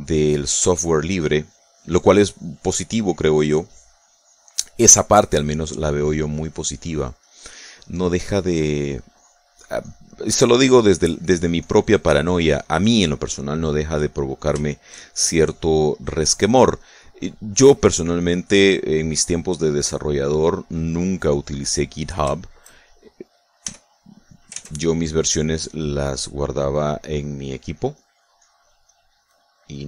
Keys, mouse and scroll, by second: 0.9 click, 1.6-5.6 drag, 6.0 middle click, 6.4-11.0 drag, 8.8 middle click, 11.2 middle click, 11.4-14.2 drag, 14.4 middle click, 15.6 shift+click, 16.0 shift+middle click, 16.1-18.8 shift+drag, 18.8 middle click, 19.0-20.9 drag, 21.1-22.4 drag, 22.6 middle click, 23.8 shift+click, 24.6 f, 25.1 click, 25.4 ctrl+s, 25.6 ctrl+click, 26.6 click, 27.4-29.8 drag.